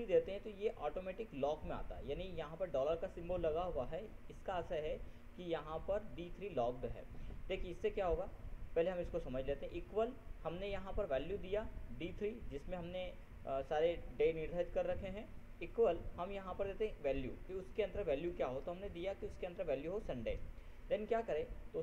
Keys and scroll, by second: 19.0 ctrl+shift+s, 19.3 ctrl+u, 19.6 ctrl+n.